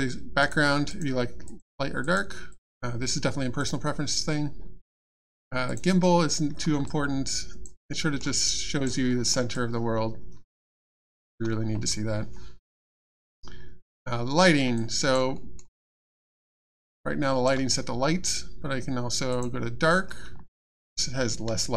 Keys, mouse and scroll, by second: 0.4 click, 2.0 click, 3.6 click, 5.7 click, 6.8 alt+click, 7.9 alt+middle click, 8.5 alt+click, 9.1 alt+middle click, 9.5 alt+click, 12.9 click, 14.7 alt+click, 15.3 alt+middle click, 15.8 alt+scroll up 1, 16.1 alt+click, 19.3 click, 20.4 alt+click.